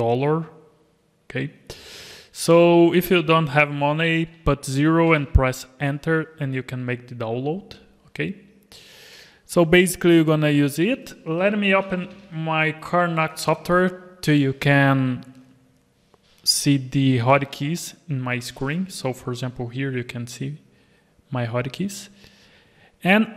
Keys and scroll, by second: 18.7 alt+a, 19.3 alt+a.